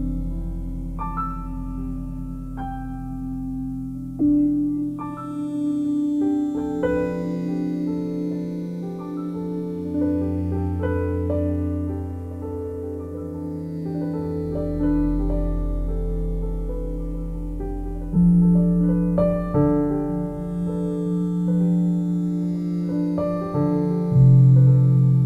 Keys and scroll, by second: 0.9 a, 1.6 c, 9.5 c, 14.8 a, 15.1 c.